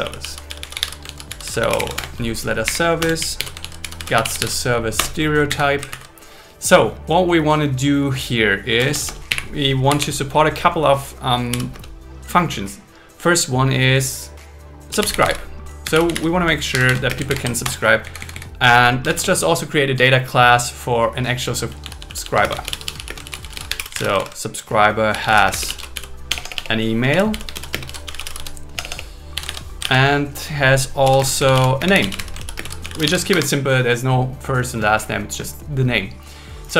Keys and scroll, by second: 1.0 shift+s, 2.0 Return, 2.6 Up, 3.0 Return, 3.4 alt+l, 3.6 shift+s, 5.0 Return, 5.6 Down, 5.9 super+Right, 8.8 Return, 9.4 Up, 11.7 space, 16.7 shift+8, 17.0 shift+9, 17.1 space, 17.3 alt+8, 17.6 Return, 18.2 Down, 19.0 Return, 22.4 space, 23.2 shift+s, 24.3 shift+8, 25.4 space, 26.3 Delete, 27.5 shift+space, 27.8 shift+s, 28.8 BackSpace, 29.5 super+1, 30.0 super+1, 31.2 space, 32.3-33.2 typing, 33.3 Escape.